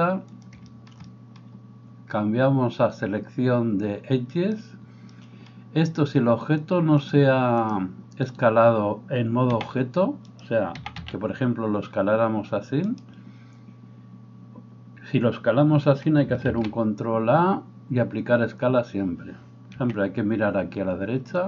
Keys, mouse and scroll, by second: 4.3-21.4 drag, 9.5 s, 10.8 s, 16.4 ctrl+a, 19.8 n.